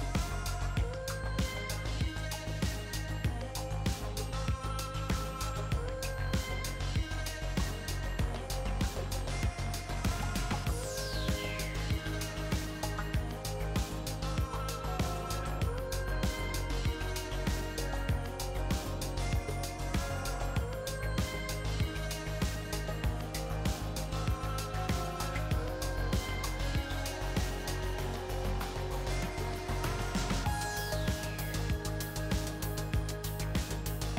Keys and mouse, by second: 0.7 click, 1.4 i, 3.1 e, 6.5 ctrl+r, 8.0 ctrl+r, 10.9-12.6 middle drag, 13.1-14.3 middle drag, 20.6 middle click, 24.6-26.1 drag, 29.3-30.9 drag, 30.9-32.8 middle drag, 32.8-34.1 drag.